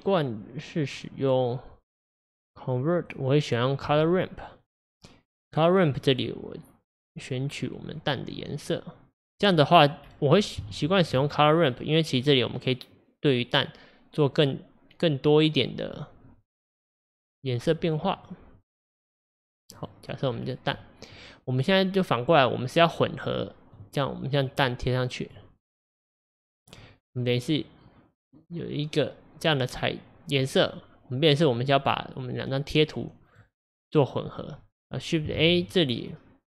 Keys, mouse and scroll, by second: 21.9-22.4 middle drag, 22.4-25.3 drag, 26.8-33.9 middle drag, 33.9-36.5 drag.